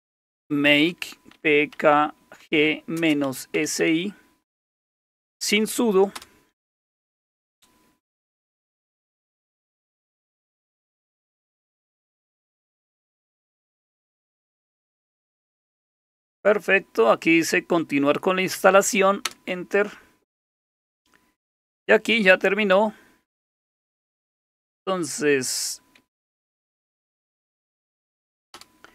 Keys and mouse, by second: 0.0-4.3 typing, 6.1 typing, 19.2 Return, 26.0-28.4 typing, 28.5 Return, 28.8 ctrl+c, 28.8 Return.